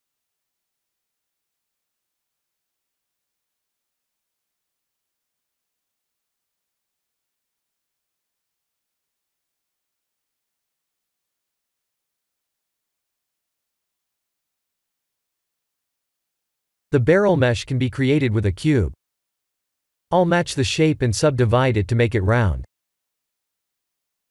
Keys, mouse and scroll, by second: 0.6 click, 1.1 b, 1.7 g, 4.2 click, 4.6 b, 5.2 g, 7.2 Tab, 7.9 scroll down 3, 8.2 shift+z, 9.0 click, 9.3 middle click, 10.4-11.0 scroll down 7, 11.2 middle click, 14.9 KP_1, 15.9 shift+middle click, 16.7 click, 17.0-17.6 scroll down 3, 17.6 shift+a, 22.0 s, 23.7 g.